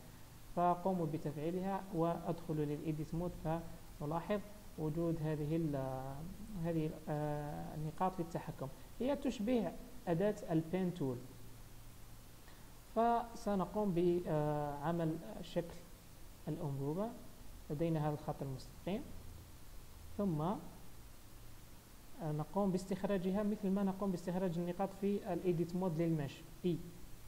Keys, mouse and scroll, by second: 0.2 click, 1.4-2.8 scroll up 11, 2.4 Tab, 2.8-3.2 scroll down 2, 3.9 click, 4.8 r, 7.2 click, 7.9 r, 9.4 click, 9.7 r, 13.3 click, 15.7 r, 17.7 Tab, 18.1-18.4 scroll up 1, 18.6 shift+middle click, 19.3 click, 19.6 Tab, 20.0 click, 23.7-26.7 scroll down 1, 26.7 e.